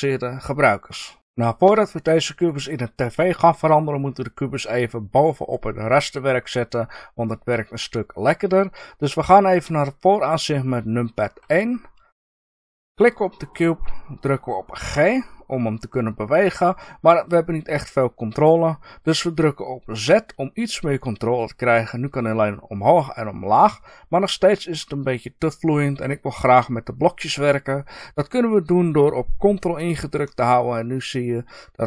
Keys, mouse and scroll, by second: 11.3 KP_1, 12.9 click, 14.8 g.